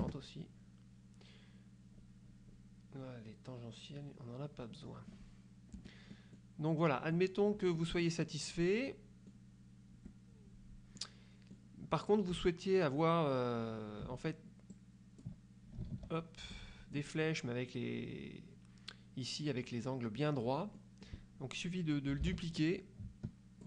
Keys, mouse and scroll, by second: 0.1 KP_Enter, 2.1-2.8 scroll up 4, 3.1 scroll up 2, 5.9 F1, 6.2 click, 7.2 click, 7.7 F2, 8.0 click, 8.9 click, 10.1 F1, 11.1 click, 14.8 ctrl+click, 16.0 ctrl+z, 16.7 click, 20.9 click, 22.3 ctrl+d, 22.7-23.6 ctrl+drag.